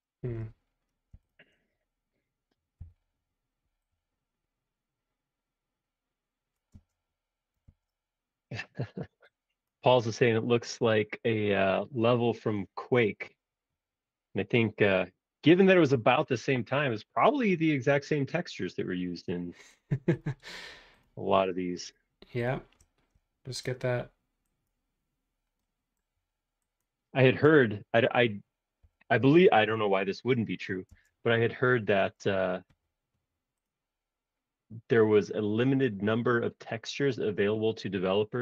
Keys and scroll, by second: 2.8 s, 6.7 space, 7.6 super+z, 8.5 s, 12.3 space, 28.8 f, 30.9 space.